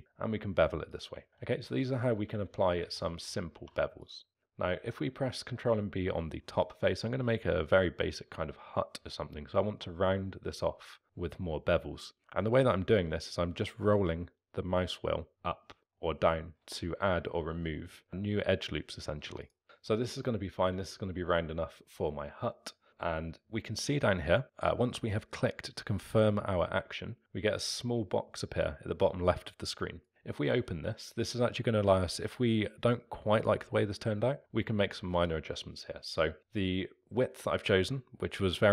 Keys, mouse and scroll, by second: 1.3 ctrl+z, 2.3 ctrl+z, 2.8 ctrl+z, 3.5 3, 4.0 click, 4.7 ctrl+b, 19.6-20.2 scroll up 4, 20.2-23.2 middle drag, 30.0 click.